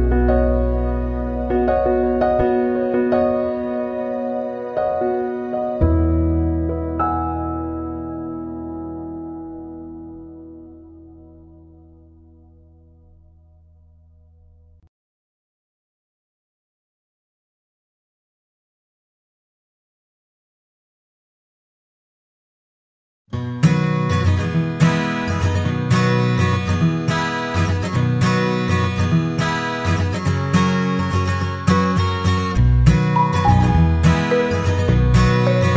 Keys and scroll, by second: 18.6 ctrl+=, 34.0 ctrl+0.